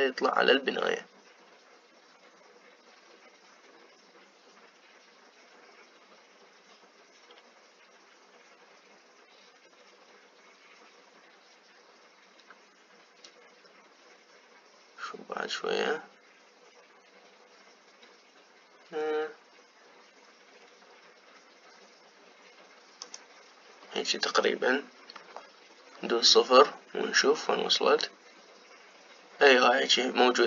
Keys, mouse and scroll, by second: 26.2 KP_0.